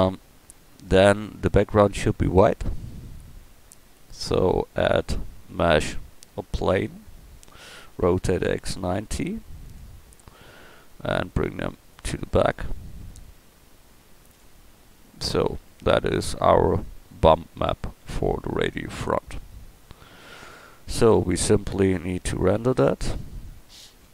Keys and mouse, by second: 8.0 r, 10.7-11.9 middle drag, 13.1 KP_1, 14.3 KP_0, 17.7 y, 18.1 a.